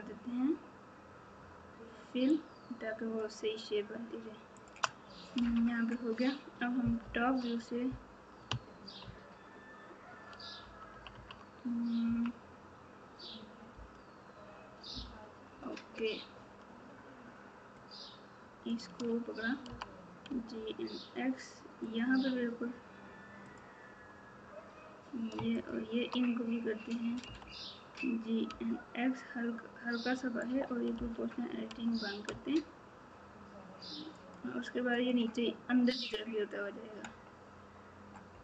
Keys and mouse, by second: 2.4 shift+click, 4.5 shift+click, 5.4 f, 7.0 KP_7, 9.0 ctrl+KP_6, 12.0 KP_3, 13.7 KP_8, 17.7 click, 19.6 g, 23.4 click, 25.5 shift+click, 27.2 g, 30.9 o, 34.9 click.